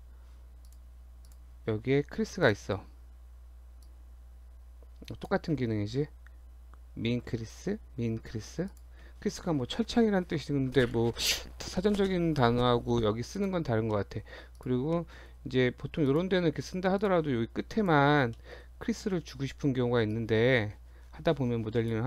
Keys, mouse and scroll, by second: 0.7 click, 1.3 click, 1.5 shift+click, 2.5 shift+click, 2.6 shift+click, 3.8 click, 7.1 ctrl+z, 8.7 click, 10.9 click, 13.9 middle click, 14.5 click, 15.0 middle click, 15.6-16.0 scroll down 1, 16.0 click, 17.0 click, 17.8 shift+click, 18.4 middle click, 20.1 click.